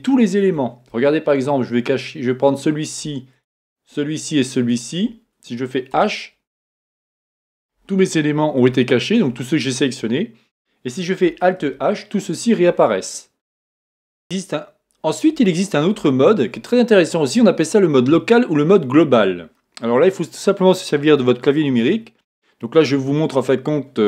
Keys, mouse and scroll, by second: 1.5-3.3 scroll up 1, 3.3 shift+click, 4.7 shift+click, 6.6-11.9 middle drag, 11.6 alt+h, 13.0-24.0 middle drag.